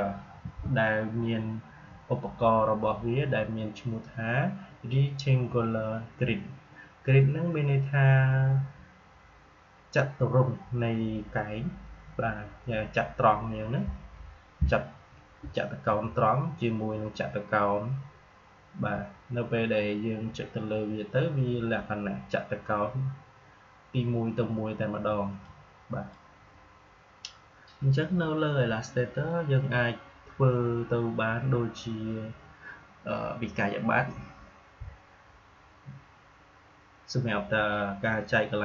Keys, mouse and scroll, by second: 0.3 Delete, 25.4-38.6 drag.